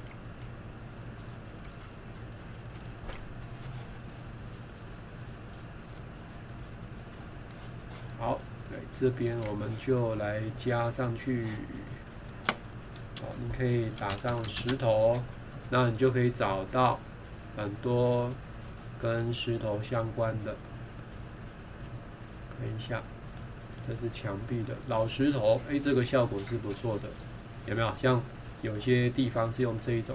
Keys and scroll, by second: 0.4 ctrl+8, 1.7 ctrl+0, 9.3 Escape.